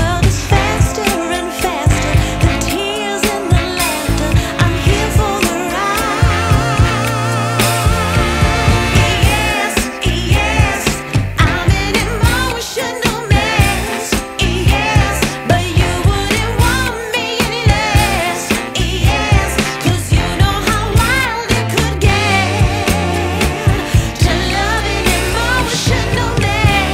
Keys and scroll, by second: 3.2 F3, 5.7 space, 6.9 shift+F2, 7.4 Escape, 7.5 space, 14.1 ctrl+Page_Down, 20.4 space, 20.7 Escape.